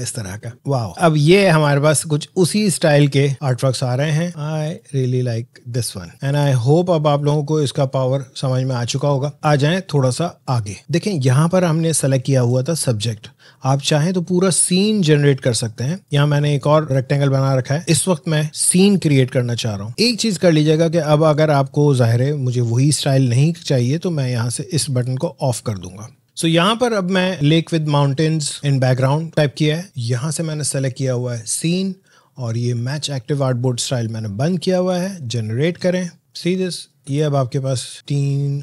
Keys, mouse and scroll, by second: 1.5 click, 4.6 click, 16.1 scroll up 1, 16.2-16.5 scroll down 2, 16.8 alt+scroll up 1, 16.8-17.7 alt+scroll down 1, 17.7 click.